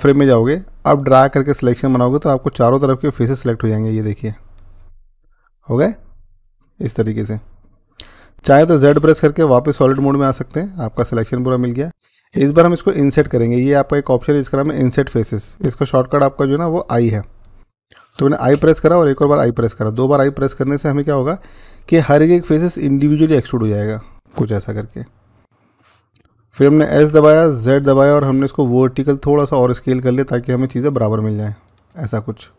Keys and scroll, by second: 8.8-9.8 z, 18.5 i, 19.1 i, 26.9-27.6 typing.